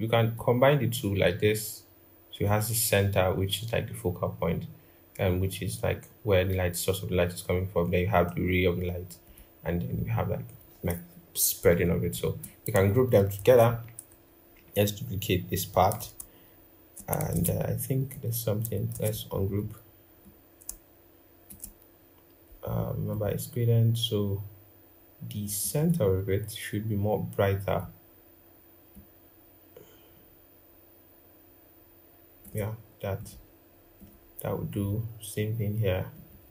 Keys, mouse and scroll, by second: 13.1 ctrl+g, 14.2 alt+click, 17.0 ctrl+z, 18.6 ctrl+z, 25.5 double click, 36.0 double click.